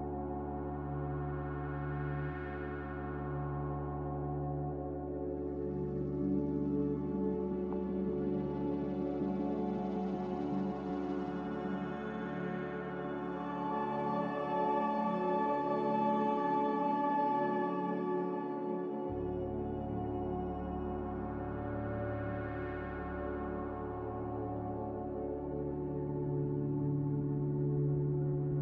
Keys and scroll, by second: 3.7 a, 4.2 q, 6.2 q, 8.3 b, 11.5 Delete, 14.4 a, 17.3 q, 19.6 m, 20.9 typing, 21.4 Return, 24.9 b, 26.4 ctrl+b.